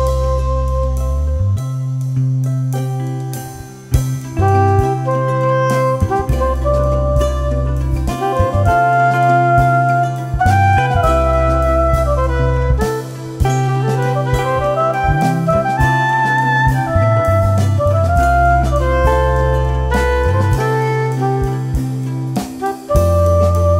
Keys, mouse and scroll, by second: 1.7-2.9 drag, 3.1-3.6 drag, 4.0 click, 5.2 click, 8.6 ctrl+click, 12.5-13.3 drag, 13.9 click, 14.9 click, 15.8 shift+click, 17.3 click, 20.4 click, 21.5-23.5 drag.